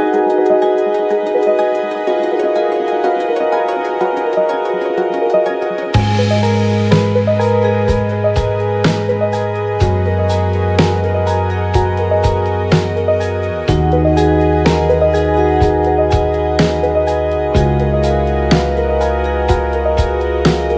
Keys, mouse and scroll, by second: 0.9-3.4 drag, 2.6 Tab, 2.8 Tab, 3.5 Tab, 3.7-6.8 drag, 5.2 Tab, 5.4 Tab, 6.9 Tab, 7.5 g, 8.6 Tab, 8.8 Tab, 9.6 middle click, 9.8 Tab, 10.7 KP_1, 11.3 click, 11.3 middle click, 11.4 Tab, 12.0 Tab, 12.2 ctrl+a, 12.5 KP_1, 13.2 Tab, 13.4 a, 15.8 f, 15.9 Tab, 16.3 n, 16.7-20.7 drag, 18.4 ctrl+z, 18.6 Tab, 19.1 r, 19.8 middle click, 20.4 Tab, 20.6 Tab.